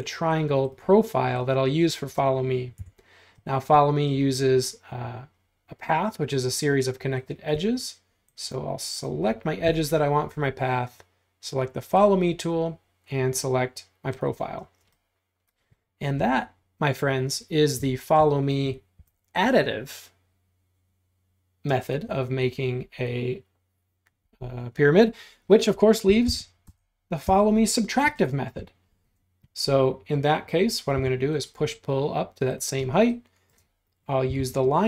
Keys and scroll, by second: 1.7 space, 2.8 BackSpace, 14.7 space, 19.0 r, 25.9-27.3 typing, 31.0 p, 32.8 space, 34.3 l.